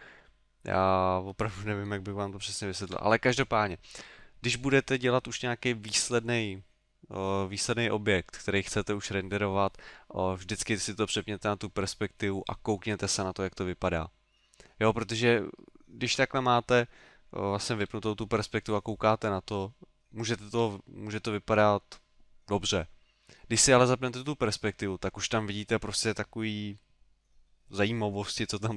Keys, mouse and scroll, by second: 3.0 KP_5, 13.1 middle click, 14.5 middle click, 16.1 KP_5, 17.8 KP_3.